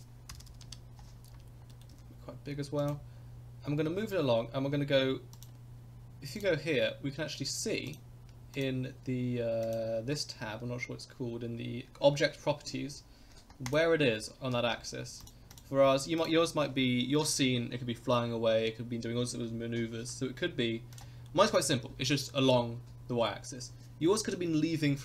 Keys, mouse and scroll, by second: 0.4 0, 1.3-1.7 scroll down 2, 1.7 middle click, 1.9 s, 3.1-3.6 scroll down 4, 3.9-4.7 scroll up 2, 5.3 click, 6.4 click, 7.9 click, 8.5 click, 9.6 click, 13.7-15.3 drag, 15.5 click, 16.2 click, 20.9 click, 21.3 middle click.